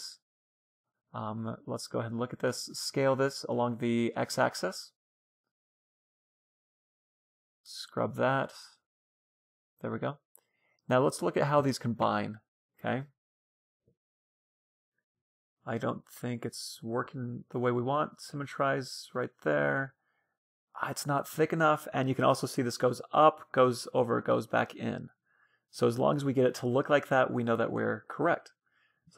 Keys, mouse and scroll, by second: 0.9 middle click, 2.1 s, 2.9 middle click, 6.6-8.4 drag, 8.2-12.0 middle drag, 10.8-15.1 right drag, 11.3 Tab, 12.5 Tab, 13.0 Tab, 14.2 Tab, 15.3 w, 16.7 Tab, 16.9 middle click, 19.3-21.7 middle drag, 24.6-28.8 middle drag, 25.8 Tab, 27.5 a, 27.8 b.